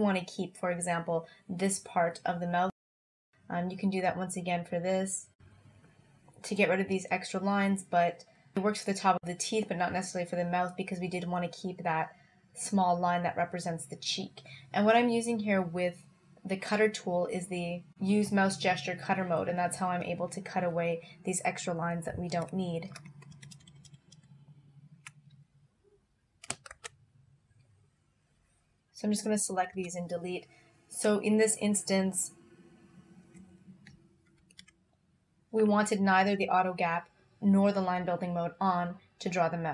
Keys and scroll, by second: 23.3 super+-, 26.8 alt+v, 29.8 BackSpace, 34.4 alt+y.